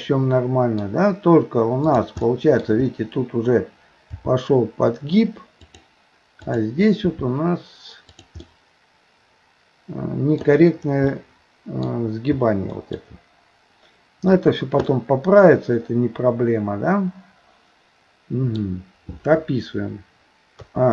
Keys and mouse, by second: 1.8 click, 2.3 middle click, 4.2 g, 6.5 click, 7.0 g, 8.5-10.4 middle drag, 11.1 middle click, 12.7 middle click, 14.9-18.6 middle drag, 20.6 a.